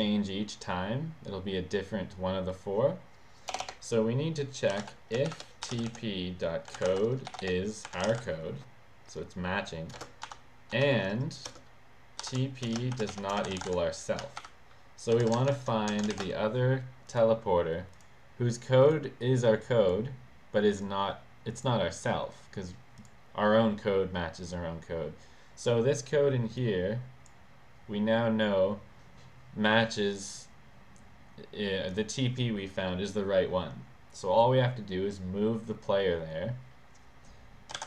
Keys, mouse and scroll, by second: 3.5 BackSpace, 4.7-8.5 typing, 10.0 shift+space, 10.3 shift+7, 10.7 shift+7, 12.0-16.1 typing, 15.4 Return, 15.9 Return, 17.1 click, 17.9 click, 18.9 click, 19.2 click, 20.8 click, 23.0 click, 26.6 click, 31.9 click, 37.5-37.8 typing.